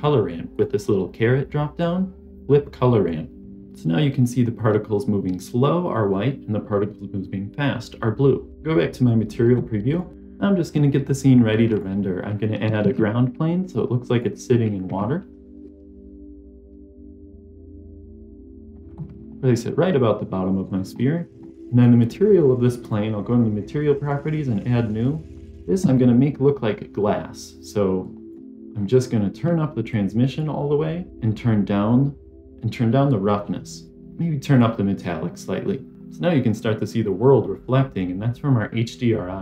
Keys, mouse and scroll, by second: 0.4-3.4 drag, 9.9 click, 10.1 Delete, 10.1 middle click, 10.1 scroll up 1, 11.6 click, 11.9 middle click, 12.7 shift+a, 14.8 s, 15.4 click, 15.6 s, 16.2 scroll down 3, 16.4 s, 16.9 g, 18.9-20.7 middle drag, 20.9-21.3 scroll up 2, 21.3 scroll down 1, 21.9 click, 22.7 click, 24.1 click, 27.9 click, 28.7 scroll down 1, 28.7-29.8 scroll up 1, 29.8 scroll down 1, 29.8-30.3 drag, 33.0-34.0 drag, 34.5-35.9 drag.